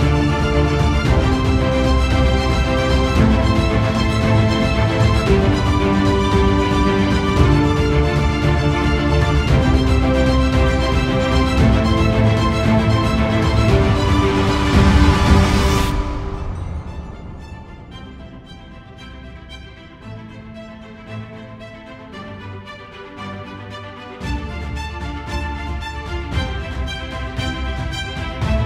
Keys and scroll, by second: 15.3 ctrl+alt+0, 20.6 ctrl+alt+0, 22.1 ctrl+i.